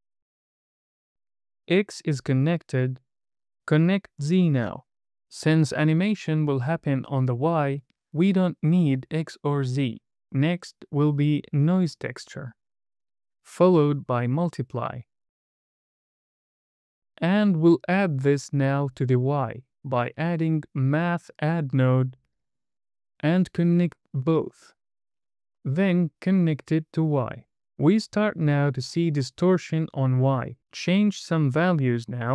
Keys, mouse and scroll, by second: 0.1 click, 1.8 middle click, 4.2 click, 10.2 shift+a, 12.8 click, 13.1 middle click, 13.7 drag, 18.0 click, 19.2-19.7 scroll down 3, 19.7 middle click, 19.9 click, 21.5 d, 23.0 click, 24.6 drag, 25.6 click, 28.8 middle click.